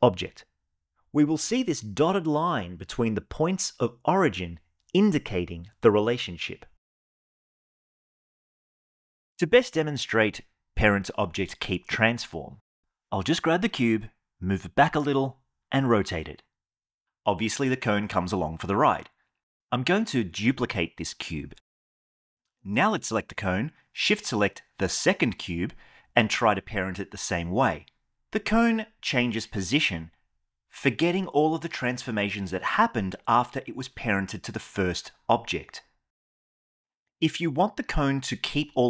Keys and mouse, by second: 2.2-6.1 shift+middle drag, 12.8 g, 13.2 x, 15.0 r, 15.7 y, 17.2 click, 19.5 shift+d, 20.0 x, 21.1 r, 23.0 click, 24.6 shift+click, 25.8 ctrl+p, 37.1 ctrl+z, 38.1 click.